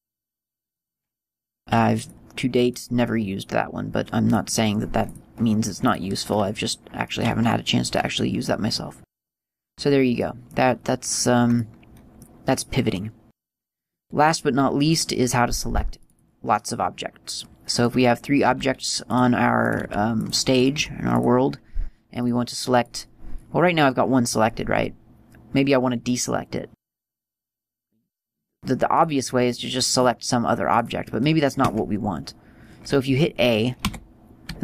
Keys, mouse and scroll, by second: 1.2 click, 2.9 click, 5.4 click, 5.5 click, 6.7 scroll down 2, 7.6 middle click, 7.6 scroll down 2, 8.8-9.6 scroll down 3, 9.6 middle click, 11.1 scroll up 3, 12.0 middle click, 12.0-12.3 scroll up 2, 14.1-18.1 right click, 18.9 g, 19.5 click, 20.0 right click, 20.2 g, 20.7 click, 21.0 right click, 21.2 g, 21.6 click, 23.1 right click, 28.5 right click.